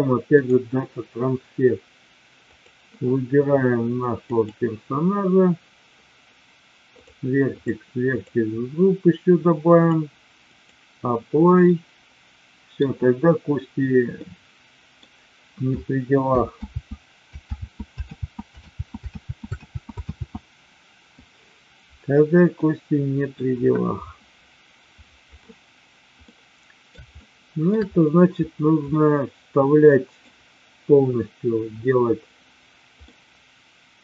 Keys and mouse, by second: 7.6 click, 9.8-10.7 drag, 11.6-12.7 middle drag, 14.3-14.9 middle drag, 16.8 ctrl+z, 17.7 ctrl+z, 18.2 ctrl+z, 18.8 ctrl+z, 19.3 ctrl+z, 19.8 ctrl+z, 20.2 ctrl+z, 22.6-23.3 middle drag, 26.2-27.7 middle drag, 28.9-30.2 middle drag, 32.9-34.0 middle drag.